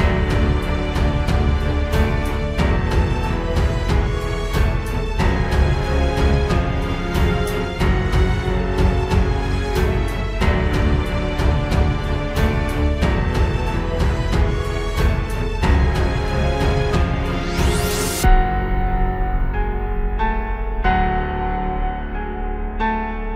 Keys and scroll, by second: 0.5 ctrl+z, 1.6 ctrl+z, 3.7 ctrl+z, 4.1 ctrl+space, 5.4 ctrl+z, 6.4 ctrl+z, 7.5 ctrl+space, 8.1 ctrl+z, 8.4 ctrl+space, 8.5 ctrl+s, 8.7 ctrl+space, 9.3 ctrl+space, 11.5 ctrl+space, 12.0 ctrl+space, 12.8 ctrl+g, 13.3 ctrl+s, 13.6 ctrl+space, 14.2 ctrl+t, 14.4 ctrl+z, 15.3 ctrl+space, 15.8 ctrl+t, 17.3 ctrl+space, 17.7 ctrl+s, 18.0 ctrl+space, 18.7 ctrl+space, 19.5 ctrl+space.